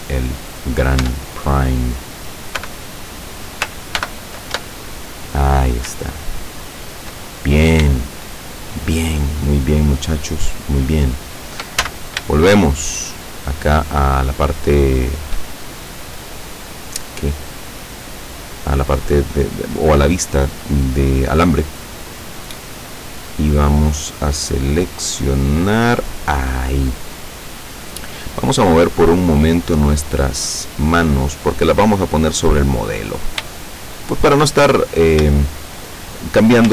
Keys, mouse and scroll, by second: 0.6 right click, 1.1 Tab, 1.6 right click, 2.7 l, 4.1 ctrl+n, 4.6 ctrl+Tab, 6.3 shift+middle click, 8.2-9.2 shift+middle drag, 9.4 shift+middle click, 10.2 shift+scroll up 1, 10.9 shift+middle click, 11.2 shift+middle click, 11.9 shift+z, 12.4-14.9 shift+middle drag, 14.9 shift+scroll down 1, 15.6-16.2 shift+scroll down 1, 16.6 scroll down 1, 21.8 right click, 23.5 right click, 24.7 right click, 25.3 right click, 29.1-33.4 drag, 33.6-34.6 shift+middle drag, 34.7-35.3 shift+scroll up 1, 35.5-36.5 shift+middle drag.